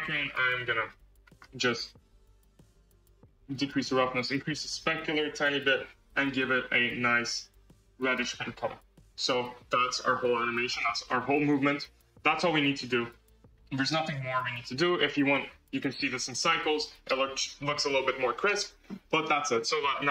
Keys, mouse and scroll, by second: 0.2-6.7 drag, 8.3 scroll, 8.9 space, 10.2 space, 10.6 space, 11.0 space, 12.9-13.7 scroll, 13.7 space, 14.0 space, 15.9 click.